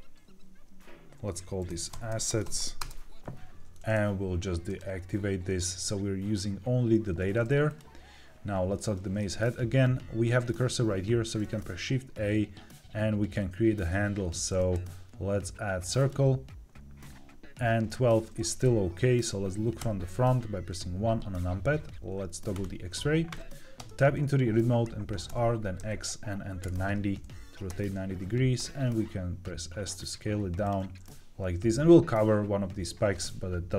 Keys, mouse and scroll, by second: 1.8 s, 2.7 Return, 4.6 click, 7.6 click, 9.1 shift+middle click, 11.2 shift+a, 19.7 KP_1, 22.4 click, 23.7 Tab, 25.2 r, 25.7 x, 26.5 KP_9, 26.6 KP_0, 27.6 KP_Enter, 28.5 s, 30.5 click.